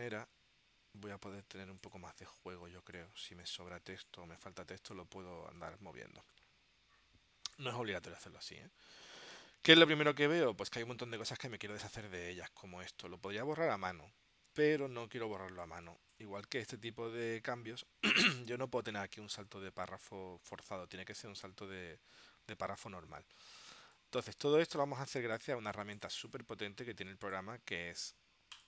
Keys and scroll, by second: 2.7 space, 11.4 space, 14.6 space, 23.9 space, 25.0 space, 26.3 space.